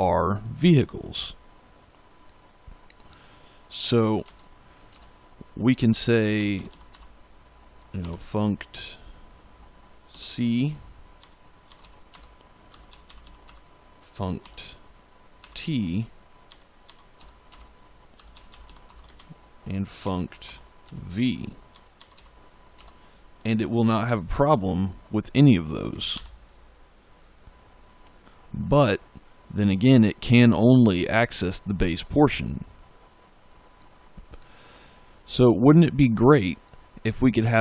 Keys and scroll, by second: 4.1 Return, 5.9-7.9 typing, 10.0 c, 11.1 Tab, 11.7-15.3 typing, 12.0 Return, 16.4 Tab, 17.1-20.7 typing, 17.4 Return, 21.6 Tab, 22.0 ., 22.6 Return, 23.9 ctrl+s, 26.0 ctrl+F5.